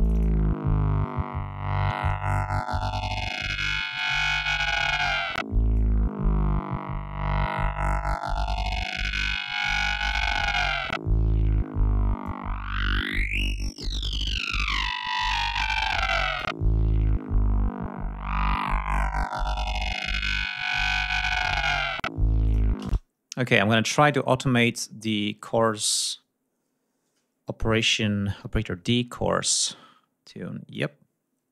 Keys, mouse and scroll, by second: 5.3-9.9 drag, 11.8-16.2 drag, 16.3-17.4 scroll down 6, 17.7-18.1 scroll up 2, 18.2-19.1 scroll down 6, 22.0 click, 22.9 space, 23.5 click, 30.3 click.